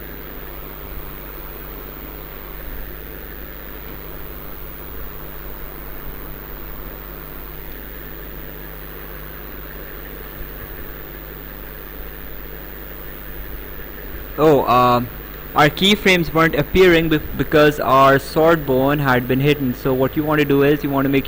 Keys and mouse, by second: 6.6 click, 9.8 click, 13.3 click.